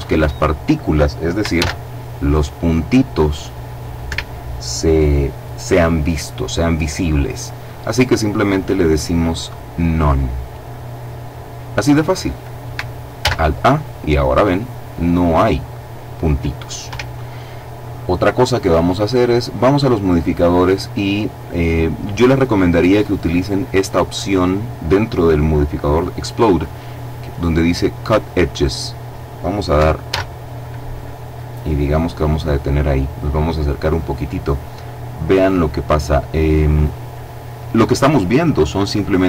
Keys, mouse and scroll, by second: 1.0 alt+a, 3.6 Escape, 9.0 click, 12.7 alt+a, 16.4 Escape, 18.2-19.8 drag, 29.6 alt+a, 31.6 click, 32.4-34.0 scroll up 4, 35.0-36.5 scroll down 2, 36.5-38.6 scroll down 1, 38.6-39.2 scroll down 1.